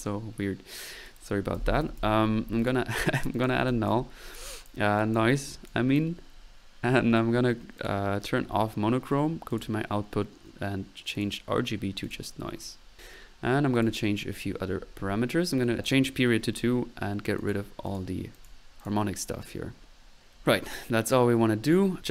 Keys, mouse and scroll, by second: 1.1 middle click, 1.6-2.5 typing, 2.6 drag, 4.1 middle click, 4.5 click, 5.2 click, 7.8 click, 8.4 middle click, 9.5 click, 17.4-17.7 drag, 17.8-18.2 drag, 18.4-18.7 drag, 18.8-19.3 drag, 20.8 middle click, 21.7-22.1 drag.